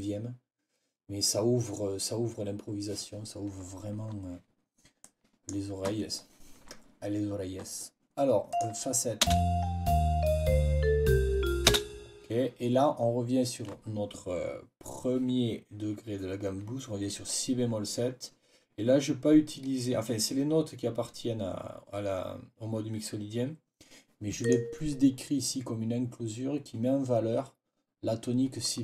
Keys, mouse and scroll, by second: 4.9 click, 8.4 click, 9.1 space, 11.6 space, 24.3 click.